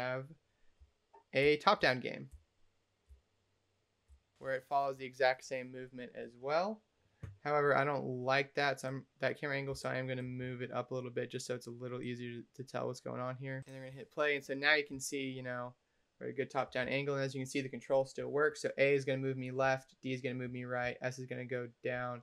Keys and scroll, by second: 14.8 d, 16.7 a, 19.5 d, 20.7 s.